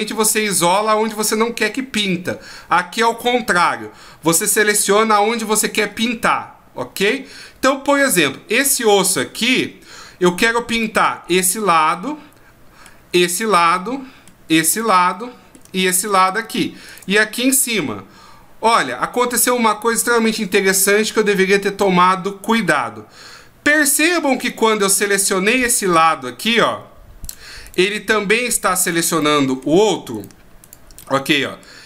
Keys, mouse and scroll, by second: 10.7 right click, 11.9 middle click, 13.3 shift+right click, 13.8 middle click, 14.7 shift+right click, 15.1 middle click, 16.0 shift+right click, 17.7 middle click, 21.8 middle click, 24.5 right click, 25.8 right click, 26.5 right click, 27.2 right click, 27.6 right click, 27.9 middle click, 28.8 right click, 29.2 middle click, 30.1 right click, 30.6 right click, 31.0 middle click.